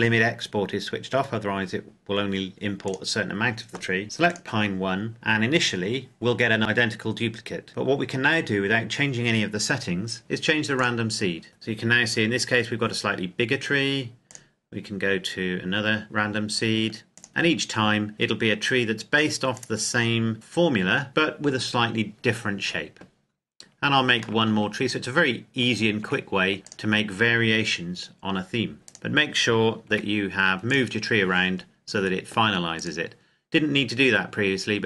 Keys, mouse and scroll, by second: 2.8 click, 6.6-7.7 scroll up 1, 10.7 click, 12.2-14.1 scroll down 1, 15.8 click, 17.1 click, 19.5 click, 24.1 click, 24.3 shift+middle click, 26.5 click, 28.7 right click, 29.8 g, 30.6 click.